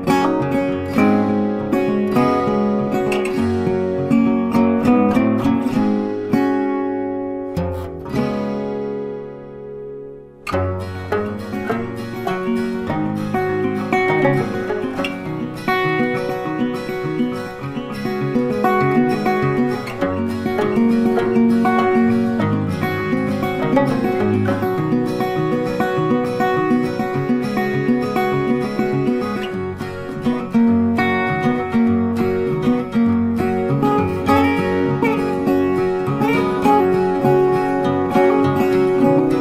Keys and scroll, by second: 11.3 ctrl+t, 27.3 ctrl+t.